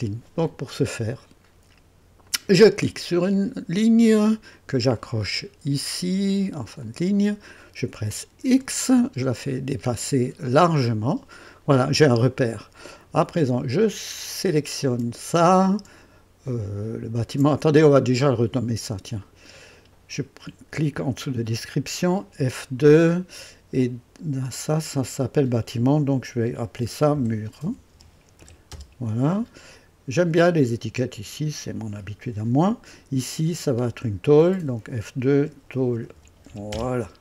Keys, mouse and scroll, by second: 2.2 click, 6.8 click, 8.5 x, 10.8 click, 14.4 click, 18.2 click, 19.2 click, 22.3 F2, 26.9-29.1 typing, 31.0 click, 34.5-37.2 typing.